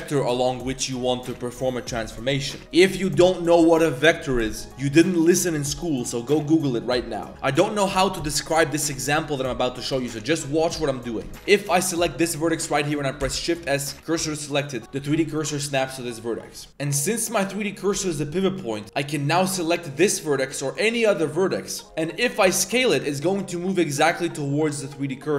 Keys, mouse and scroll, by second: 0.4 click, 8.7 click, 11.1 click, 11.3 shift+s, 11.6 click, 12.0 click, 13.2 shift+s, 14.5 drag, 15.1 g, 16.3 drag, 16.6 shift+click, 17.1-17.9 drag, 20.7 click, 21.1 click, 21.5 click, 22.0 click, 22.4 s.